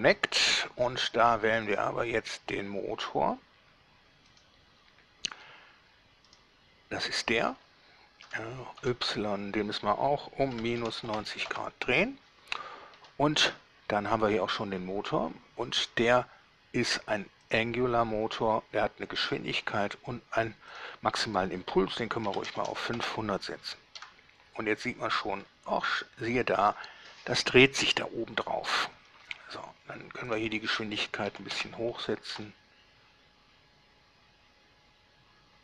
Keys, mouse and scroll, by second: 1.8 click, 4.5 click, 6.5 right click, 8.4 r, 9.0 y, 10.8 -, 11.0 9, 11.1 0, 11.7 Return, 17.7 click, 21.0 click, 22.5 5, 22.7 0, 22.8 0, 23.2 Return, 24.2 alt+a, 25.6-26.4 middle drag, 29.2 Escape, 30.5 click, 31.5 5, 31.7 Return, 32.5 a.